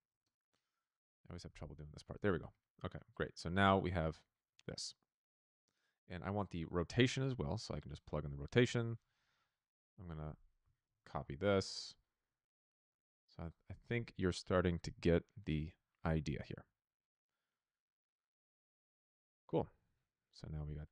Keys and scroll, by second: 0.1 Return, 1.4 n, 10.8 ctrl+c, 12.8 ctrl+v, 13.6 BackSpace, 13.9 r, 14.0 Return, 16.2 p.